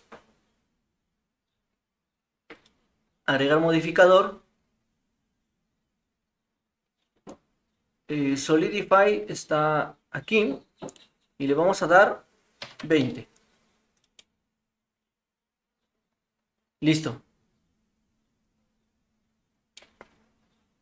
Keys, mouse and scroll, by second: 2.7-10.4 drag, 11.5-13.6 drag, 14.2-19.5 middle drag, 19.7 middle click.